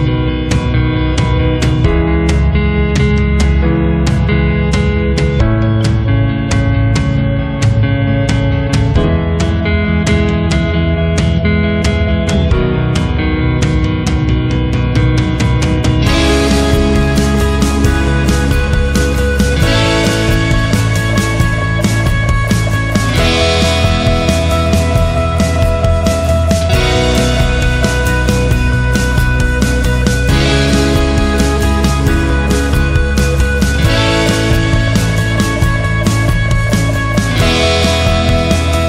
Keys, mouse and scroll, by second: 0.8 shift+h, 2.4 Return, 7.3-14.4 drag, 15.4-18.4 drag, 21.9 click, 26.1 click, 27.9 click, 30.6 click, 33.9 click.